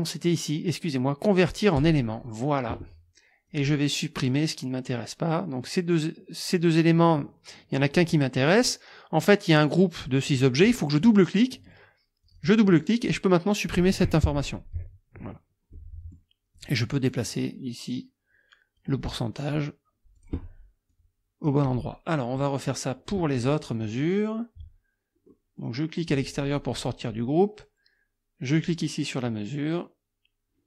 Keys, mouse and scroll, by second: 1.8 click, 3.5 click, 4.2 click, 12.2 click, 12.8 click, 14.8 Delete, 15.7 click, 16.6 click, 17.1-19.0 drag, 20.2 click, 20.9-21.6 drag, 21.9 click, 22.4 click, 25.3 click, 26.0 click, 28.5 click.